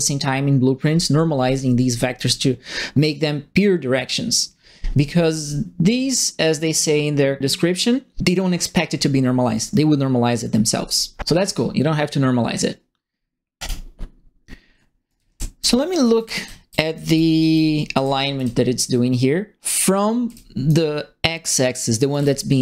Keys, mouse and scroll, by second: 13.5 click, 14.9-18.3 typing, 15.0-20.6 right drag, 20.2 q, 21.8-22.6 typing, 21.9-22.6 right drag.